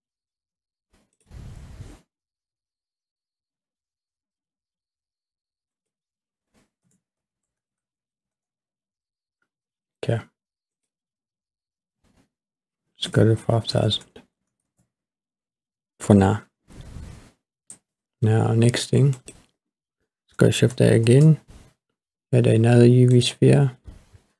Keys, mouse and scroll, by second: 1.2 click, 5.7-8.6 drag, 7.7 KP_0, 8.2 KP_0, 10.7-14.7 drag, 13.9 KP_0, 19.3 click, 21.1 shift+a.